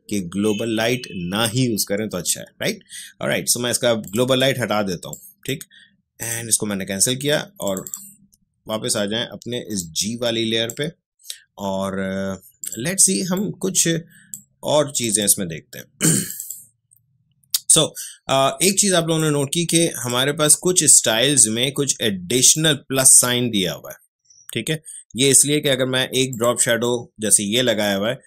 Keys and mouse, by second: 4.0 click, 9.0 Escape, 9.8-20.0 drag, 22.5 click, 26.3 click.